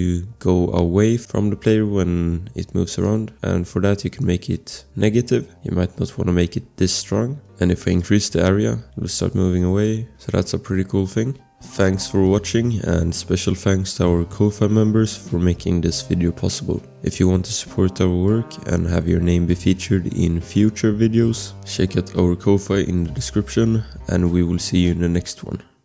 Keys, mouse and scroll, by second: 2.9 click, 3.0 click, 5.5-6.0 scroll, 7.2 click, 8.5 click, 10.2 click, 10.4 click.